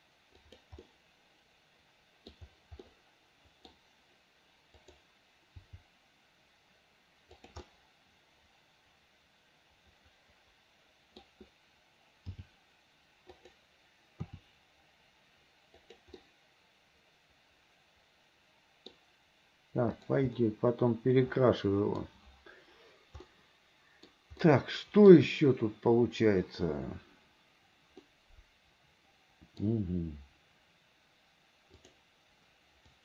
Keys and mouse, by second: 1.0-2.6 middle drag, 2.9-4.0 middle drag, 4.9 click, 5.8 g, 7.9-11.3 drag, 12.5 g, 14.3 r, 16.5 click, 17.4-19.1 middle drag, 20.5-22.1 middle drag, 23.4 middle click, 24.6 middle click, 28.1-29.8 middle drag, 31.9 click.